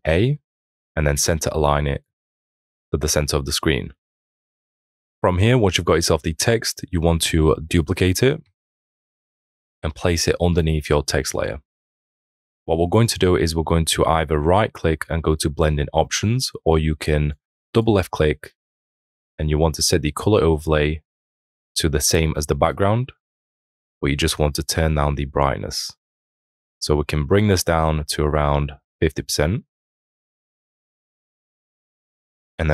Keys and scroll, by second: 4.2 ctrl+d, 8.2 ctrl+j.